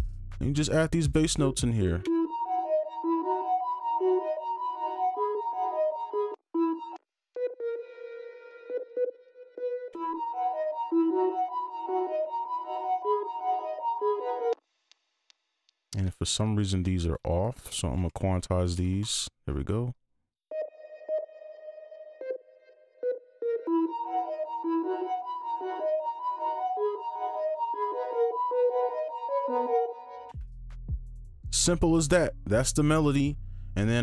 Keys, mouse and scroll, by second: 1.8 double click, 2.0 space, 6.3 space, 6.5 space, 6.9 space, 7.5 double click, 9.9 space, 14.0 right click, 14.5 space, 15.2 ctrl+click, 17.4 ctrl+shift+click, 18.4 ctrl+q, 18.6 ctrl+q, 18.7 ctrl+q, 19.0 right click, 22.7 right click, 23.4 double click, 23.6 space, 24.0 right click, 25.4 click, 25.7 click, 26.5 ctrl+Down, 27.1 right click, 30.3 space.